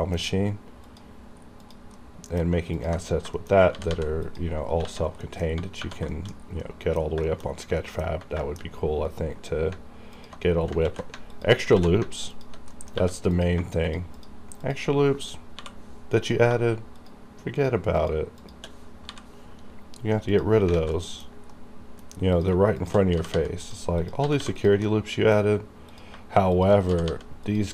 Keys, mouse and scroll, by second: 0.3-0.9 scroll up 1, 0.9 click, 0.9 click, 2.0 middle click, 2.8 ctrl+click, 2.8 ctrl+click, 3.2 scroll down 1, 3.4 shift+middle click, 3.4 shift+middle click, 3.6 scroll up 1, 3.7 g, 3.9 g, 4.3 click, 4.7-5.9 scroll down 3, 4.9 alt+a, 5.3 middle click, 6.2 shift+middle click, 6.3-6.7 shift+scroll down 2, 6.7 middle click, 7.2 scroll up 1, 7.3 shift+middle click, 7.9 middle click, 8.2-9.8 scroll up 4, 8.5 shift+middle click, 10.2 alt+click, 10.6 scroll down 1, 10.9 ctrl+x, 11.4 alt+click, 11.8 ctrl+x, 12.4 alt+click, 12.8 middle click, 13.0 1, 13.3 click, 13.4 click, 13.9 shift+click, 13.9 shift+click, 15.7 m, 16.9 shift+click, 17.0 shift+click, 20.4 click, 20.8 alt+a, 21.0 middle click, 21.4 scroll up 1, 21.6 middle click, 21.6 middle click, 22.4 click, 22.9 shift+click, 23.2 g, 23.4 g, 23.7 click, 24.3 g, 24.5 g, 24.6 click, 24.9 middle click, 26.0 click, 26.6 shift+click, 27.0 g, 27.1 g, 27.5 click, 27.5 click.